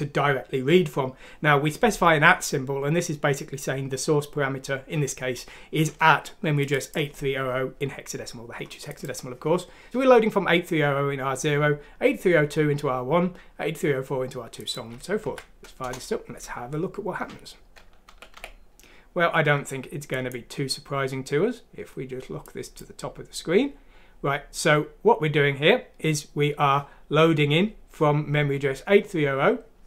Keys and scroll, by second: 15.2 F6, 15.8 typing, 18.0 typing.